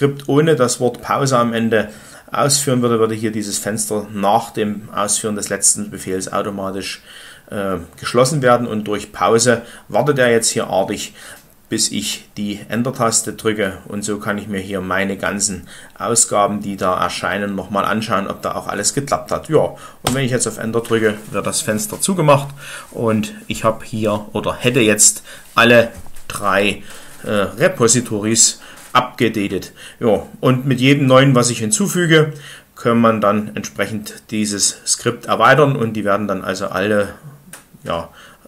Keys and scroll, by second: 19.9 Return.